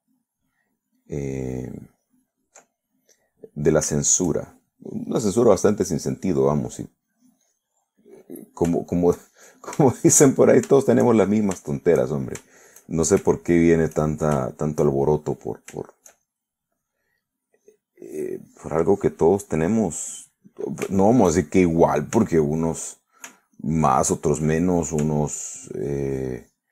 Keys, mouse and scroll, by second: 2.2-3.7 ctrl+drag, 3.8-5.8 ctrl+middle drag, 6.1-8.8 drag, 8.8-13.9 middle drag, 14.0 shift+middle click, 14.5-16.6 shift+middle drag, 16.8 shift+middle click, 17.3 shift+middle click, 18.6 click, 19.1 click, 21.1 middle click, 22.0-23.0 shift+middle drag, 23.2 shift+f, 23.8 click, 24.6 ctrl+click, 25.6 ctrl+middle click.